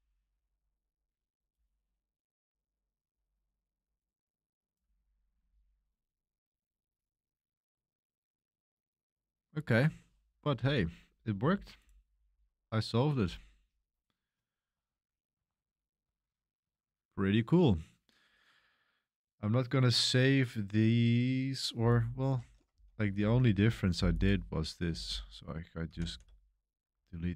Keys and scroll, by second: 22.7 k, 23.2 l, 24.8-27.3 typing.